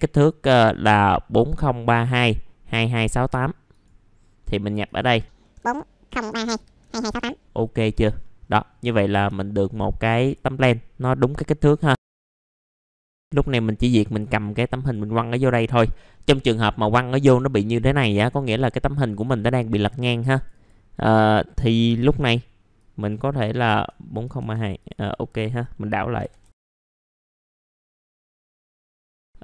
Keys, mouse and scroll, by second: 5.5 KP_4, 6.5 Tab, 6.8 KP_2, 7.7 middle click, 7.8-8.7 scroll down 1, 8.7 middle click, 9.6 click, 10.5 middle click, 11.7 click, 12.2 click, 14.6 middle click, 15.6 scroll up 1, 16.7 middle click, 19.1 click, 22.7 click, 24.8 click, 26.2 KP_4, 26.9 middle click, 27.2 click, 28.3 w, 28.4 middle click, 28.4 scroll down 1, 28.5 scroll up 1, 28.7 scroll down 1, 28.9 middle click, 29.2 shift+click.